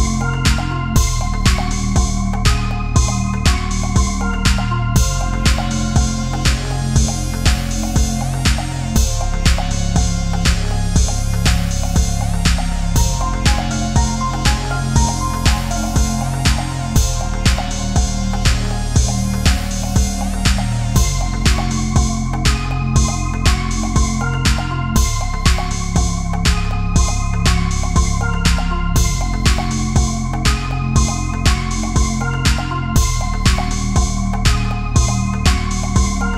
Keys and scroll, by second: 0.8 space, 2.0 space, 3.7 space, 8.1 ctrl+=, 8.2 space, 12.0 Down, 12.1 Left, 12.5 Down, 13.6 Right, 14.6 Left, 14.9 Down, 15.3 Right, 15.5 Down, 16.3 Up, 16.5 Down, 17.2 space, 17.7 space, 18.1 Down, 18.3 space, 19.3 space, 21.1 Left, 21.2 Down, 21.3 Right, 22.1 Down, 22.3 Up, 23.0 Down, 24.2 Right, 24.3 Down, 25.1 Left, 25.2 Up, 25.3 Left, 26.2 Left, 27.7 space, 28.6 space, 29.1 Right, 29.3 Up, 29.4 Right, 29.5 Down, 29.8 Right, 30.3 space, 30.7 Up, 30.7 Right, 31.1 space, 31.4 Down, 31.6 Left, 31.7 Up, 31.8 Left, 32.6 Up, 33.0 Down, 34.1 space, 35.3 space, 35.9 space.